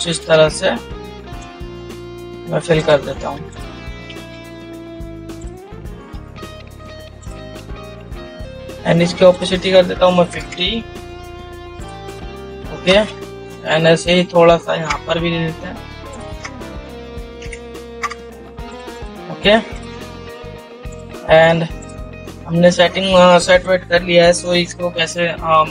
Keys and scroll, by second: 4.6 ctrl+z, 14.3 ctrl+-, 17.8 ctrl+0.